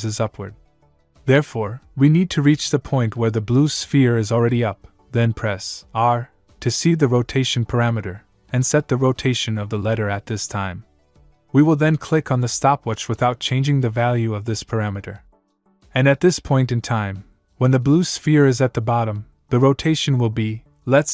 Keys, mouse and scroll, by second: 2.5 click, 6.9 click, 7.3 r, 13.6 click, 15.6 click.